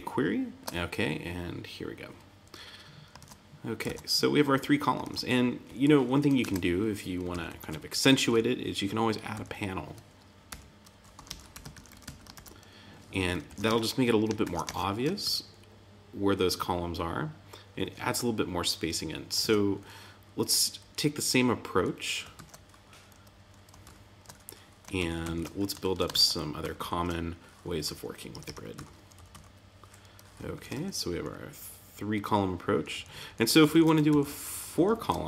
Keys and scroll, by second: 3.1 super+Tab, 6.3 super+z, 7.3 alt+Left, 8.2 Right, 9.3 Left, 12.3 shift+>, 13.4 super+Right, 13.6 Tab, 14.4 super+s, 14.6 super+Tab, 19.3 super+Tab, 20.8 Down, 22.3 super+\, 23.8 super+z, 24.9 super+Left, 25.8 super+l, 26.1 super+c, 26.6 super+v, 27.8 Up, 28.3 Return, 28.7 Up, 30.5 super+Right, 30.7 Tab, 31.0 Down, 33.7 super+Right, 34.0 alt+Left.